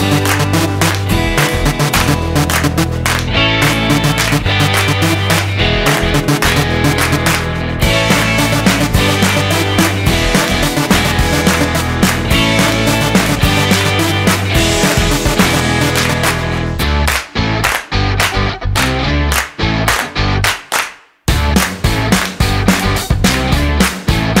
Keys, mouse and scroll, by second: 1.6 Delete, 3.8 middle click, 6.4 middle click, 6.6-8.7 scroll up 3, 8.7 2, 9.4 middle click, 9.9 scroll up 2, 10.7 click, 12.2 ctrl+b, 21.8 Tab, 22.3 middle click, 23.1 right click.